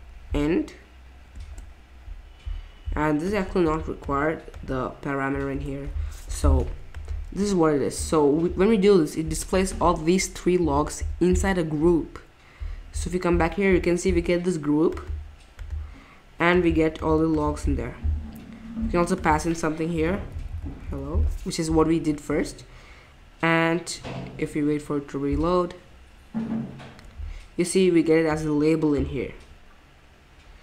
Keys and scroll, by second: 1.4 shift+9, 5.5 BackSpace, 12.4 BackSpace, 18.2 BackSpace, 19.7-21.7 typing.